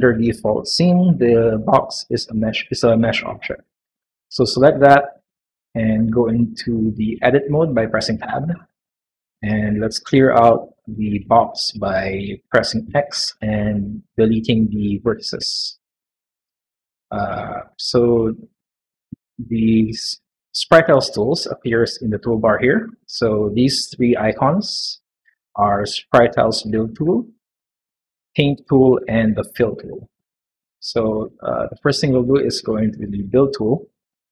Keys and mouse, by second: 2.3 middle click, 3.2 middle click, 4.0 shift+middle drag, 6.1 middle click, 8.2 Tab, 8.7 middle click, 10.4-12.0 drag, 12.8 x.